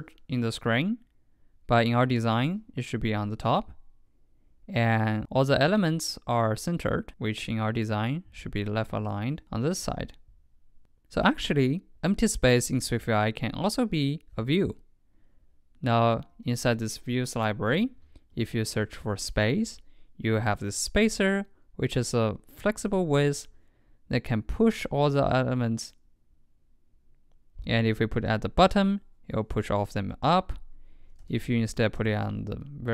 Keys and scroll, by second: 31.3 super+x, 32.2 super+v.